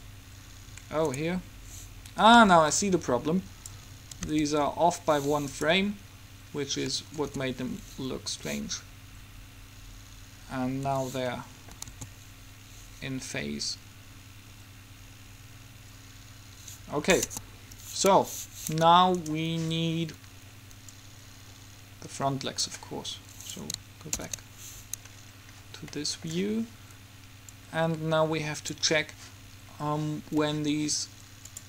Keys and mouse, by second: 1.3-3.1 drag, 2.5 b, 4.4 g, 7.4 alt+a, 11.0 Escape, 11.5 middle click, 11.9 middle click, 12.0 alt+a, 16.6 Escape, 17.4 KP_3, 19.4 right click, 21.3-22.8 drag, 23.6-25.6 right drag, 27.7-29.5 drag.